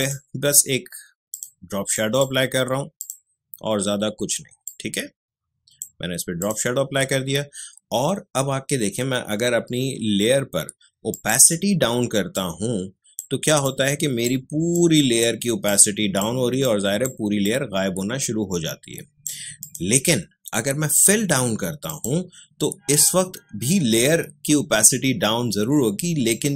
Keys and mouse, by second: 11.1-19.6 drag, 26.3-26.5 drag.